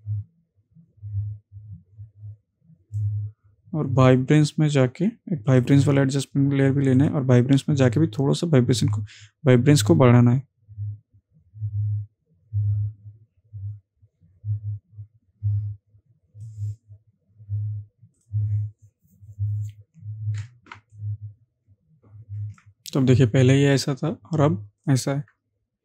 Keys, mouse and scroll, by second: 5.5-14.3 drag, 20.8 ctrl+space, 21.0 ctrl+click, 21.3-22.8 ctrl+space, 23.8 alt+click.